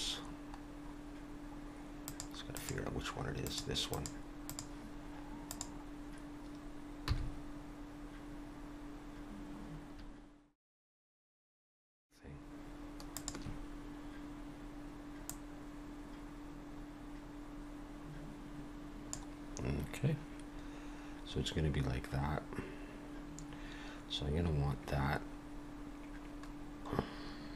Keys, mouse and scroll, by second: 2.1 click, 2.1-2.5 scroll down 2, 2.5 click, 3.5 click, 3.9 click, 4.5 click, 7.1 g, 15.3 click, 26.5-27.5 scroll down 2.